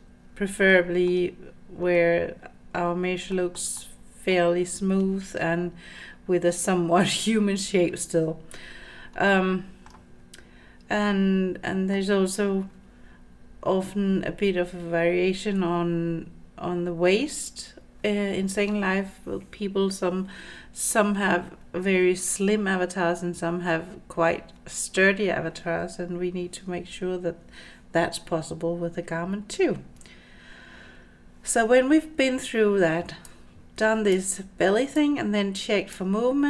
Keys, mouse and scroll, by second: 0.7-1.1 middle drag, 1.9-2.8 middle drag, 3.4 shift+middle drag, 3.8-4.4 middle drag, 9.3 middle click, 11.0-12.0 middle drag, 33.3 click, 34.9-36.0 drag.